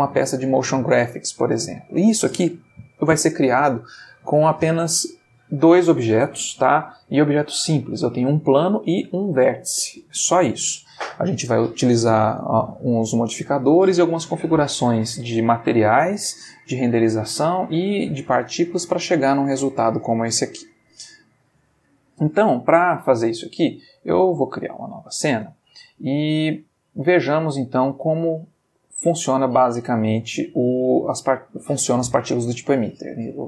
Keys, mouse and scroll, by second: 20.4 Escape, 23.5 click, 24.7 click, 26.2 middle click, 27.5 middle click, 33.3 click.